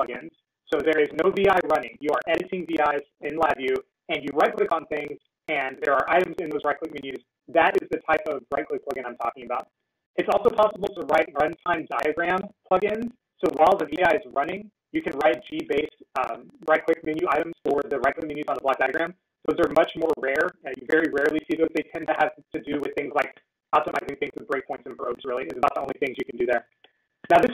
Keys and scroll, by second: 5.6 ctrl+e.